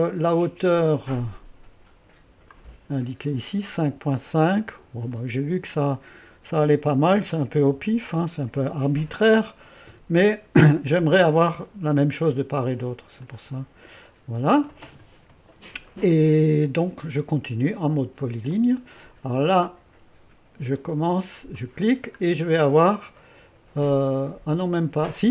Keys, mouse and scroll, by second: 2.6-4.5 drag, 5.2-7.2 drag, 7.2-8.3 typing, 9.9 Return, 13.3-16.0 drag, 18.6 click, 21.6 click, 22.3-25.3 scroll up 1.